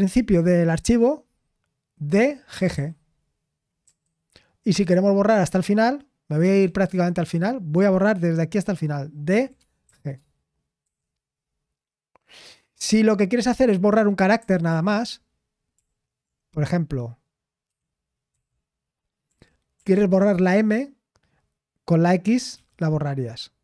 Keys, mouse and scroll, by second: 7.2 typing, 9.3-10.8 typing, 14.4 typing, 15.7 typing, 17.6-19.7 typing.